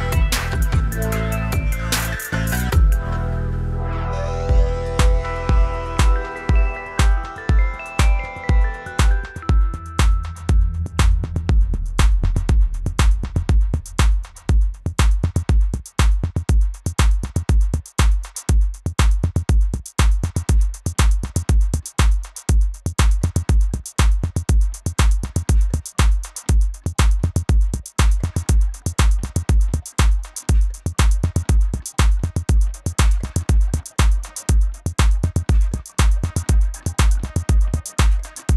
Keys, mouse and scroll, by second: 2.0 click, 2.5-4.0 typing, 2.6 click, 2.9 click, 3.3 click, 4.7 click, 6.6 click, 7.7 click, 8.4 click, 8.6 -, 9.5 click, 10.4 space, 10.4 click, 11.2 space, 11.3 click, 12.0 a, 12.2 click, 13.7 click, 13.7 v, 14.0 click, 17.5 click, 18.7 click, 20.7 click, 20.9 v, 21.2 click, 26.0 click, 26.2 =, 26.4 space, 26.6 click, 28.0 space, 28.6 click, 29.6 click, 32.9 shift+click, 33.9 Right, 34.9 click, 35.5 v, 35.7 click, 36.0 ctrl+-, 36.6 click.